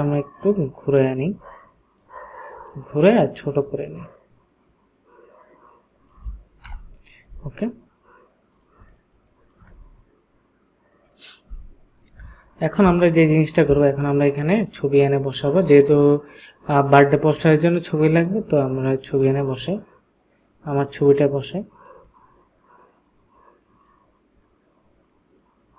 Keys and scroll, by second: 6.7 Return, 10.5 ctrl+space.